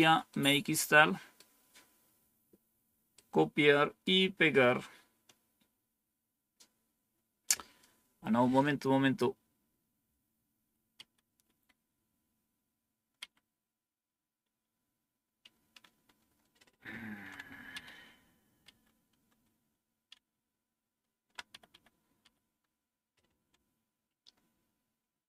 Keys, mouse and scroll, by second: 0.2-1.3 right drag, 3.0 right click, 15.7 Up, 15.7 typing, 16.7 Up, 21.6 Up, 22.1 Up, 24.5 Up, 24.8 Up, 24.8 BackSpace.